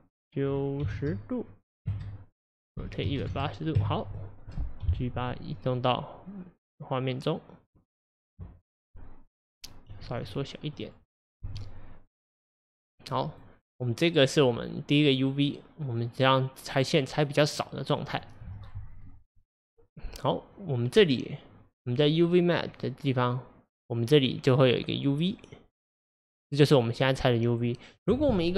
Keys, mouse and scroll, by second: 2.8 r, 4.9 g, 10.1 s, 11.5 g, 13.4 click.